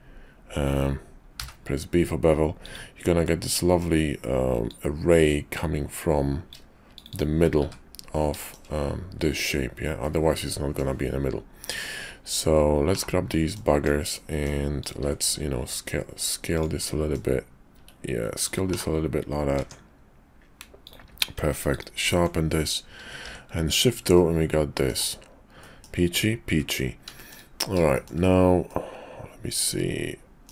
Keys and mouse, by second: 3.3 middle click, 8.4 shift+click, 10.0 click, 12.9 /, 13.3 click, 13.7 Tab, 14.1 click, 15.1 s, 16.8 middle click, 17.7 s, 18.7 /, 19.5 Tab, 20.7 click, 21.0 q, 23.2 shift+2, 24.1 click, 25.6 click, 27.1 shift+click, 27.9 shift+click, 28.6-30.5 middle drag.